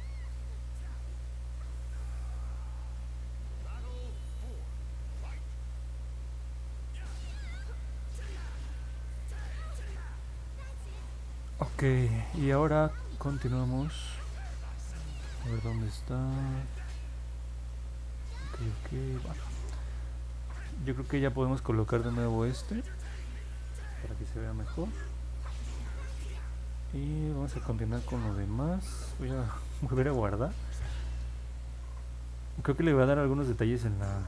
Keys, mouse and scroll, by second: 0.4 click, 1.2 click, 3.5 click, 4.5 click, 6.4 click, 7.1 click, 7.7 click, 8.1 click, 29.9 ctrl+s.